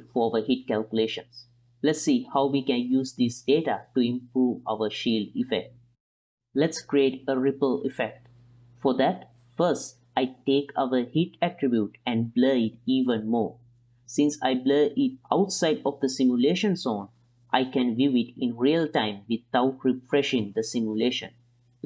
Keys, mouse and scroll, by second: 0.7 ctrl+middle click, 0.9 middle click, 1.2 click, 1.6-2.3 middle drag, 2.7 click, 3.1 ctrl+middle click, 3.7 ctrl+s, 5.4-6.3 middle drag, 6.5-7.6 drag, 7.7-8.5 middle drag, 9.8 middle drag, 11.8-14.5 drag, 14.7 ctrl+shift+click, 15.0 click, 18.1-20.6 middle drag, 21.0 ctrl+click, 21.3 middle click, 21.6 middle click.